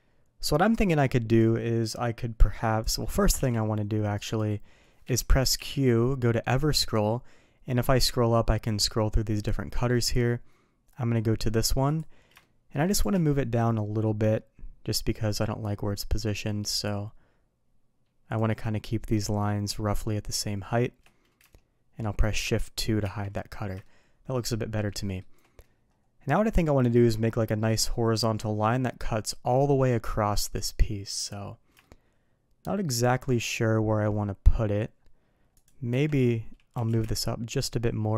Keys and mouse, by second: 3.3 q, 5.5 q, 12.3-12.7 shift+middle drag, 12.9 g, 23.0 shift+2, 23.8-24.4 middle drag, 24.8-25.1 middle drag, 31.8-33.2 shift+middle drag, 35.5 click, 35.8 Tab, 36.7 g.